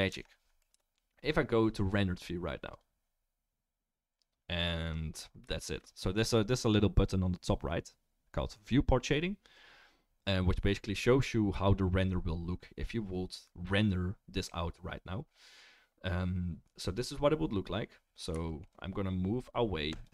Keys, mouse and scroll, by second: 0.1 Tab, 0.7 KP_0, 2.8 click, 2.8 middle click, 13.6-20.0 middle drag, 20.0-20.1 right drag.